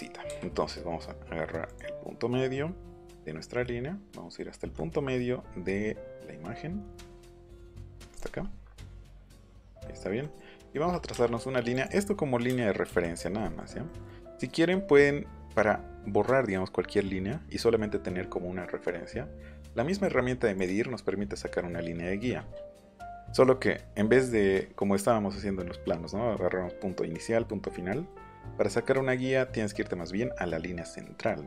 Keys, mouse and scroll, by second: 1.6 click, 4.7 middle click, 4.9 scroll down 1, 4.9 middle click, 5.2 click, 5.6-6.8 middle drag, 8.1 click, 8.3 middle click, 8.9 middle click, 9.1 middle click, 9.4 click, 11.1 Up, 11.7 click, 13.0 click, 13.3 middle click, 13.9 middle click, 14.3 middle click, 14.7 middle click, 14.9 middle click, 20.5 click, 21.3 middle click, 24.2 middle click, 27.9 middle click.